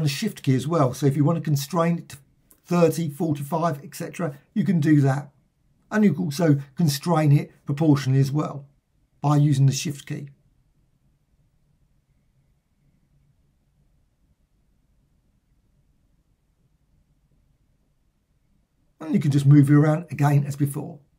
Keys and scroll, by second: 15.7 Return.